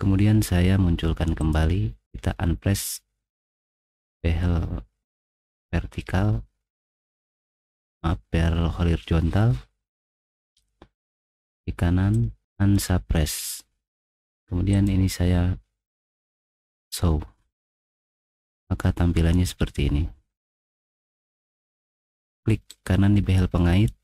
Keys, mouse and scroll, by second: 1.4 click, 11.1 right click, 12.1 click, 16.7 click, 17.5 middle click, 18.1 middle click, 18.5-20.1 scroll up 5, 23.1 right click.